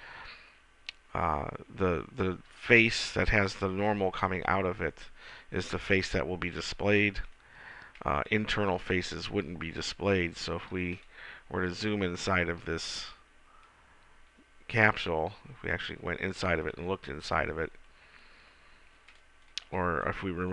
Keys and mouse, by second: 9.6-13.0 middle drag, 14.1-16.0 middle drag, 16.2 middle click, 17.0-20.5 middle drag.